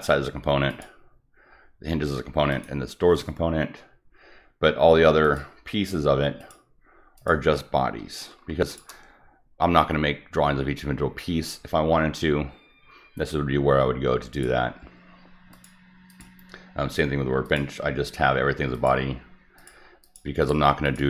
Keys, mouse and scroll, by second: 0.6 click, 2.4 click, 5.2 click, 6.3 click, 7.1 click, 8.7 shift+click, 14.3 click, 15.5 click, 16.1 click, 17.5 click, 18.7 click, 19.6 click, 20.0 click, 20.4 click, 20.9 click.